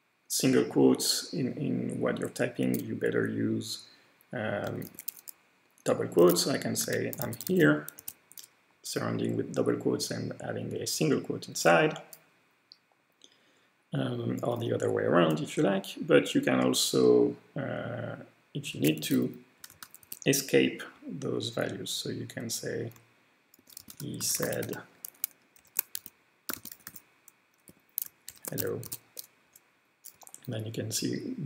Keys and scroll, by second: 2.6 typing, 4.6-8.5 typing, 11.5 Return, 18.5-20.1 typing, 23.3-28.2 typing, 25.6 alt+shift+;, 28.3 alt+shift+:, 28.6 alt+shift+:, 28.8 alt+shift+:, 29.5 Return.